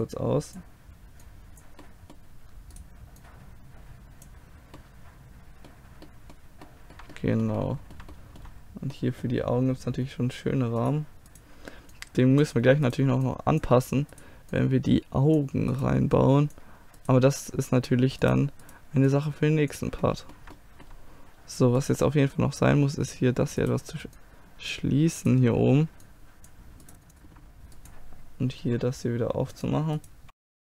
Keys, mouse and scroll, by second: 1.8-3.1 middle drag, 2.8-4.7 right drag, 5.0-10.8 middle drag, 10.8-18.3 drag, 11.9-18.3 right drag, 20.1-22.3 middle drag, 27.2-28.6 middle drag, 28.6 g, 30.0 right click, 30.2 g, 30.4 click, 30.5 middle click.